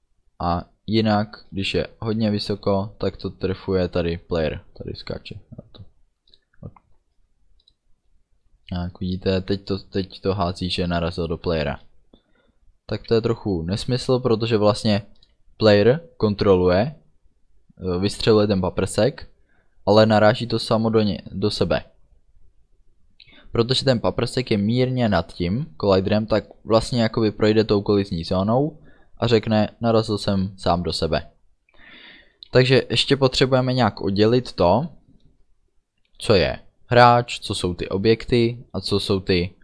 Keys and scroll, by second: 1.4 space, 7.1 space.